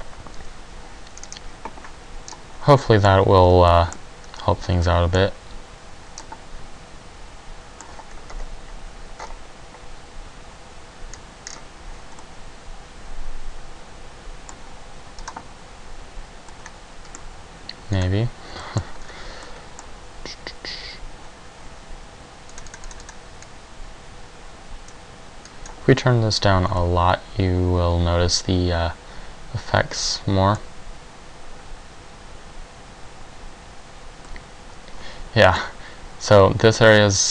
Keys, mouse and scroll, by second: 13.7 middle click, 15.4 click, 25.7 click.